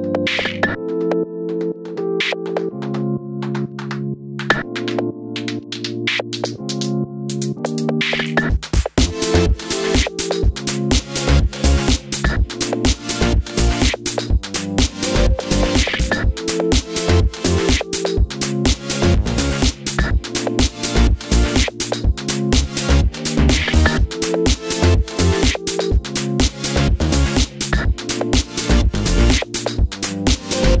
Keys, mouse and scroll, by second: 0.2 shift+click, 0.6 g, 1.4 click, 1.6 shift+click, 1.8 g, 3.9 middle click, 4.6 scroll down 2, 4.9 Tab, 5.0 click, 5.2-6.5 middle drag, 6.7 click, 6.9 middle click, 7.0 Tab, 7.3 click, 7.5 3, 7.6 click, 7.8 middle click, 8.3-8.6 scroll down 1, 8.6 click, 9.0 shift+click, 9.1 middle click, 9.6 KP_Decimal, 10.2 scroll down 1, 10.3 shift+middle click, 10.6 shift+click, 11.6 i, 12.5 click, 13.0 ctrl+click, 14.8 middle click, 16.2-18.0 middle drag, 18.0 2, 18.0 click, 18.5 middle click, 19.8-22.7 middle drag, 21.4 KP_Divide, 22.2-22.7 scroll up 2, 22.7 click, 22.9 middle click, 23.1 3, 23.3 click, 23.5 shift+click, 24.1 shift+click, 24.5 shift+click, 25.3 shift+click, 25.8 x, 26.0-27.1 middle drag, 27.1 click, 27.6 click, 27.8 click, 28.0-30.8 middle drag, 29.1 KP_Divide.